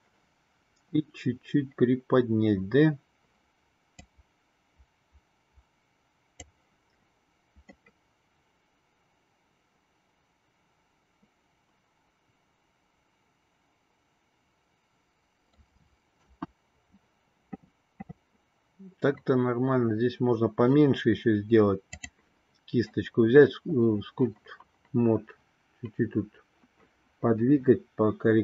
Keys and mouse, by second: 4.0-6.6 drag, 7.8-15.3 middle drag, 16.1 KP_1, 21.9 click.